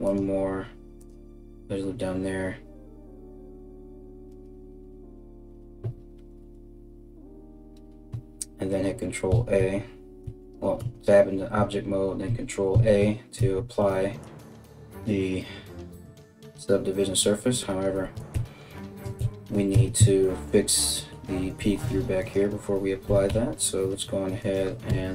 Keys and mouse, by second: 9.0 ctrl+a, 9.8 Tab, 10.4 Tab, 11.9 ctrl+a, 13.0 Tab, 15.5 KP_3, 18.0 ctrl+z, 19.3 Tab, 21.4 1, 21.8 right click, 22.7 g, 24.5 o.